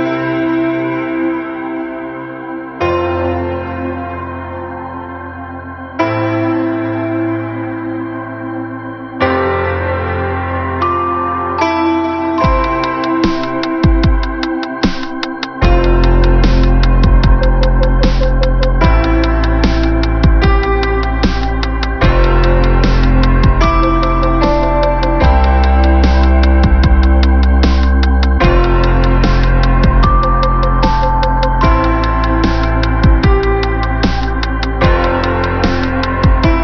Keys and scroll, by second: 5.3 ctrl+alt+shift+n, 24.7 space, 26.9 space, 34.5 ctrl+-.